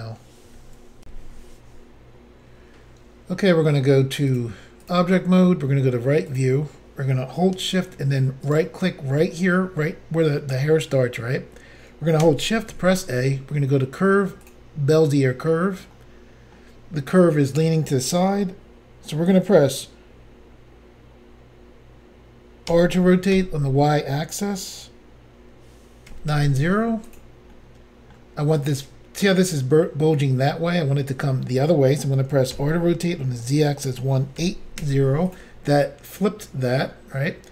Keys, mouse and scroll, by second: 1.0 Insert, 4.3 click, 4.4 click, 4.9 click, 4.9 click, 6.3 click, 8.5 shift+right click, 10.9 scroll up 3, 12.7 a, 14.5 click, 14.5 click, 15.9 middle click, 22.7 r, 23.4 y, 26.1-27.2 typing, 27.2 click, 27.6 middle click, 32.6 r, 33.2 z, 34.4-34.8 typing, 35.4 click, 36.9 middle click.